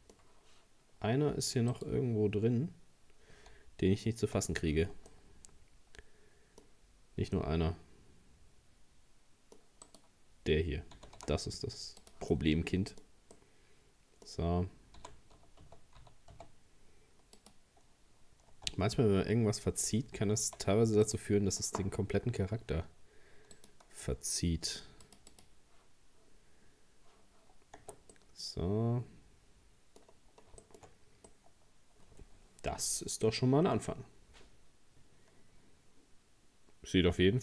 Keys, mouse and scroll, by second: 1.7 right click, 3.5 z, 5.1-9.9 middle drag, 9.9 right click, 11.0 g, 12.3-15.0 middle drag, 15.0 g, 18.1 scroll down 2, 18.5 Tab, 19.2 Tab, 20.4 z, 23.6-26.3 drag, 26.3-26.8 scroll down 1, 27.5-27.8 scroll down 6, 27.8 Tab, 28.1-30.0 middle drag, 30.0-30.6 scroll down 3, 30.6 shift+middle click, 30.9-31.3 scroll up 1, 31.3-34.3 middle drag.